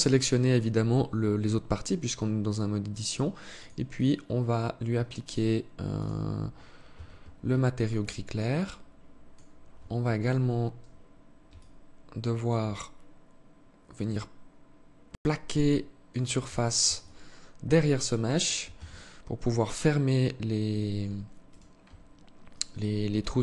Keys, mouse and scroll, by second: 3.1 click, 3.6 click, 5.6 click, 6.5 Tab, 7.4 alt+click, 11.1 alt+click, 15.0 alt+click, 16.0 alt+shift+click, 16.4 alt+shift+click, 18.2 Tab, 20.9 alt+right click, 22.8 alt+click.